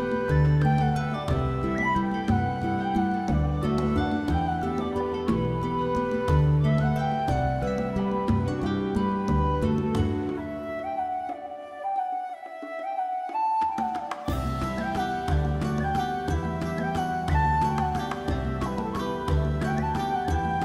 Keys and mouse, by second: 0.5 click, 0.7 middle click, 1.3 click, 1.5 alt+middle click, 1.6 alt+middle click, 1.6 alt+click, 1.9 shift+click, 2.0 alt+click, 2.2 alt+click, 2.4 alt+z, 2.5 click, 2.8 shift+middle click, 3.0 g, 3.4 click, 3.6 middle click, 4.0 click, 4.1 middle click, 4.4 alt+z, 4.4 alt+middle click, 4.6 alt+z, 4.8 alt+middle click, 4.9 alt+middle click, 5.1 shift+middle click, 5.4 g, 5.9 click, 6.3 alt+z, 6.3 middle click, 6.9 alt+middle click, 7.0 alt+middle click, 7.3 Tab, 7.9 click, 8.1 Tab, 8.9-11.1 typing, 9.8 click, 10.0 click, 10.6 click, 11.0 click, 11.3 click, 11.7 click, 11.8 click, 12.1 1, 12.4 g, 12.7 click, 12.9 click, 13.3 shift+click, 13.4 g, 13.7 click, 14.0 click, 14.2 g, 14.6 click, 14.9 click, 15.0 middle click, 15.4 middle click, 15.8 shift+click, 15.9 middle click, 16.2 shift+middle click, 16.3 middle click, 16.8 alt+middle click, 17.0 alt+middle click, 17.7 alt+z, 17.8 g, 18.2 click, 18.4 middle click, 18.7 alt+z, 18.8 middle click, 19.0 alt+middle click, 19.2 alt+middle click, 19.4 Tab, 19.6 Tab, 20.0 alt+click, 20.2 alt+z, 20.2 alt+middle click.